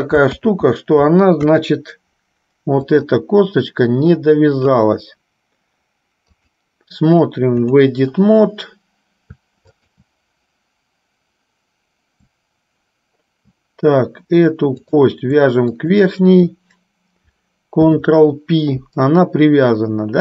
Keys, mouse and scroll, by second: 1.6 KP_1, 3.0 click, 6.5-8.1 drag, 14.9 click, 16.0 shift+click.